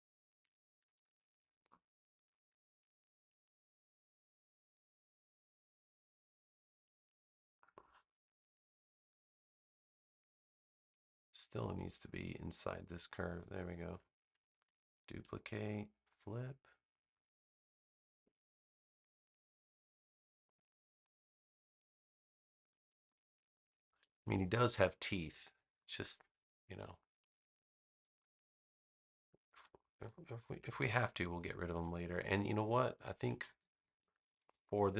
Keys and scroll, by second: 0.8 super+=, 1.6 space, 14.8 super+j, 23.9 super+-, 25.5 super+=, 26.5 space, 33.3 super+-, 34.5 space.